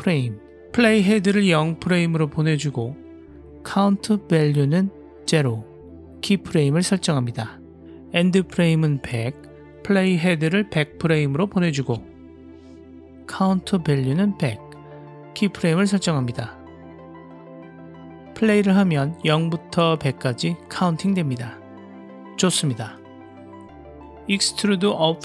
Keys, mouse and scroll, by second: 0.7 click, 3.0-5.5 drag, 6.3 drag, 8.3-9.7 drag, 9.1 KP_0, 10.7-12.0 drag, 11.5 KP_0, 13.0-14.3 drag, 13.8 KP_0, 15.4 click, 16.9 click, 17.6 click, 18.5 click, 19.0 click, 19.2 space, 20.2 space, 20.7 Home, 21.0 space, 23.0 space, 24.1-24.4 drag.